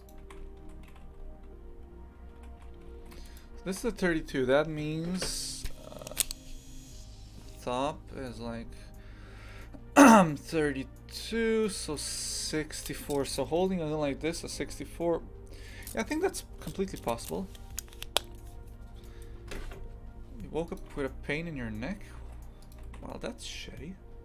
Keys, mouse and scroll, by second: 0.0 right click, 0.2 shift+f, 3.7 shift+f, 20.9 shift+f, 22.8 shift+f.